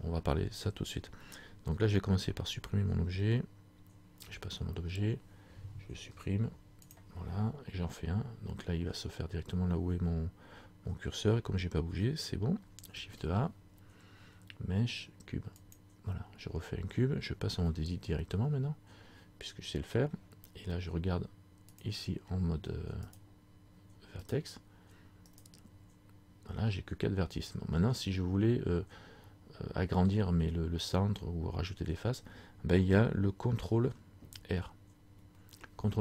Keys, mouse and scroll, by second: 4.3 Tab, 6.1 Delete, 13.0 shift+a, 17.7 Tab, 21.9 click, 23.2 right click, 35.3 ctrl+r.